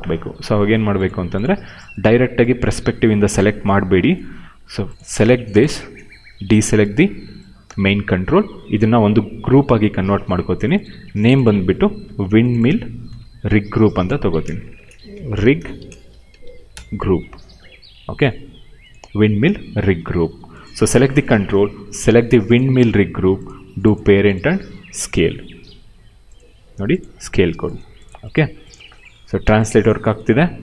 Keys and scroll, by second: 9.7 ctrl+g, 11.9 ctrl+c, 13.0 ctrl+v, 14.4-16.8 typing, 20.8 q, 29.0 w, 29.8 ctrl+z.